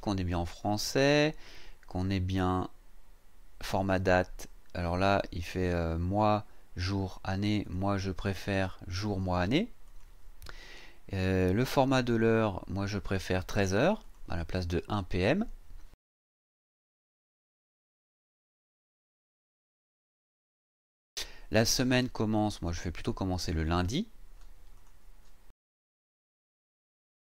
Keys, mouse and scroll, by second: 7.6 click, 9.0 click, 9.8 click, 12.2 click, 13.3 click, 14.0 click, 17.5 scroll down 1, 18.3-21.2 scroll down 4, 21.2 scroll down 1, 22.5 click, 23.6 click, 24.7 click, 25.9-27.2 scroll down 2, 27.2-27.3 scroll down 2.